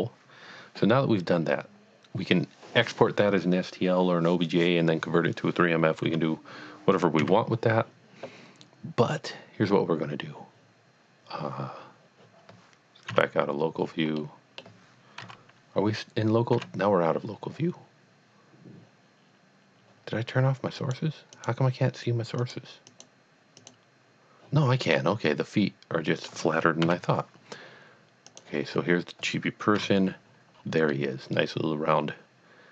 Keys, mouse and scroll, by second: 1.4-2.2 scroll down 1, 6.0 scroll down 1, 6.1 KP_Divide, 7.2 KP_Divide, 13.1 KP_Divide, 13.8-14.3 scroll down 2, 14.3 middle click, 15.2 KP_1, 17.4 KP_Divide, 20.8 KP_Divide, 21.4 click, 22.4 click, 22.9 click, 23.6 click, 25.0 scroll up 1, 25.5-26.2 middle drag, 26.8 KP_1, 28.3 click, 28.7 scroll down 1, 29.8 KP_Divide, 30.6-30.9 scroll down 1, 30.9 middle click, 31.3 middle click.